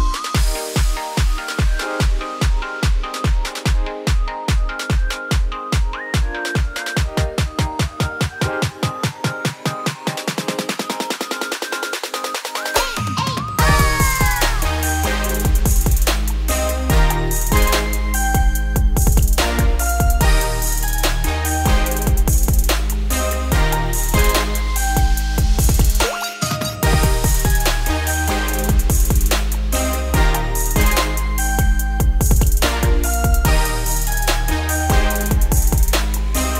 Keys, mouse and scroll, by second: 0.7 click, 5.4 middle click, 5.8 3, 5.9 click, 6.2 scroll down 1, 6.3-8.8 middle drag, 8.8 g, 10.3-11.3 middle drag, 11.3 ctrl+r, 13.3-14.5 middle drag, 14.5 p, 15.2 Tab, 15.6 click, 16.3 Tab, 16.7 click, 17.0 alt+click, 19.2 ctrl+x, 20.3 Tab, 20.8 click, 21.2 Tab, 21.7 a, 22.0-22.6 scroll up 1, 22.6 e, 24.6-25.6 middle drag, 25.6 1, 25.7-27.7 middle drag, 27.7 click, 28.1 middle click, 28.5 scroll down 1, 28.7 x, 29.4 middle click, 30.0 a, 30.3 middle click, 31.2-32.9 scroll up 2, 32.9 s, 33.8 g, 34.7 middle click, 35.4 alt+e.